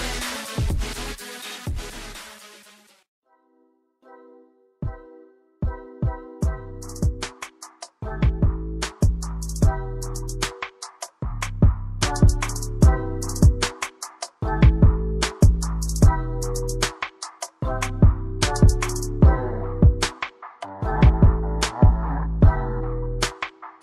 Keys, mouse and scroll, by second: 0.0 click, 2.9 double click, 3.5 click, 3.8 double click, 4.3 click, 4.5 double click, 4.9 click, 5.2 double click, 6.2 click, 6.4 double click, 7.1 click, 21.0 click.